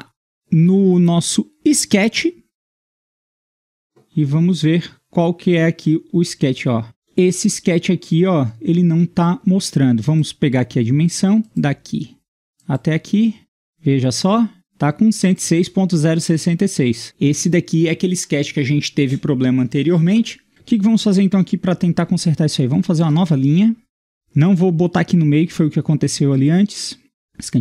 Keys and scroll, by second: 20.5 Escape, 23.0 i, 27.2 typing.